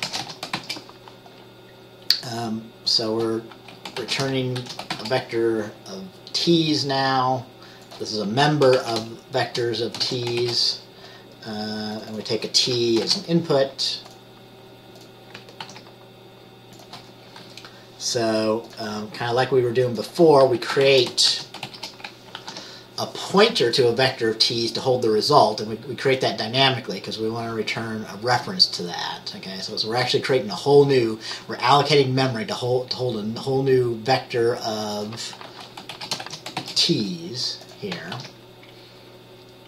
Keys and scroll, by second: 0.0-0.7 typing, 4.1-5.1 typing, 8.9 typing, 10.2-10.6 typing, 13.2 typing, 15.8 ctrl+s, 21.0-21.8 typing, 22.5 ctrl+s, 36.1-36.7 typing, 38.3 ctrl+s.